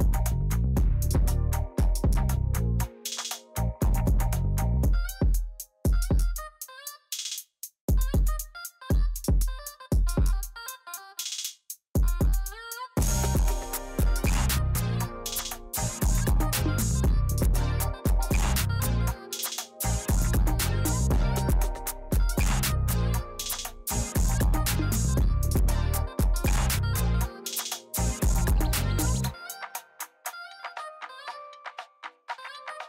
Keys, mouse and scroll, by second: 0.0 middle click, 0.2 middle click, 0.9 middle click, 1.2 middle click, 1.4 middle click, 1.8 middle click, 2.3 middle click, 2.6 middle click, 2.8 middle click, 3.4 middle click, 3.6 middle click, 4.0 middle click, 4.8 middle click, 5.8 middle click, 6.2 middle click, 7.0 middle click, 22.9 middle click.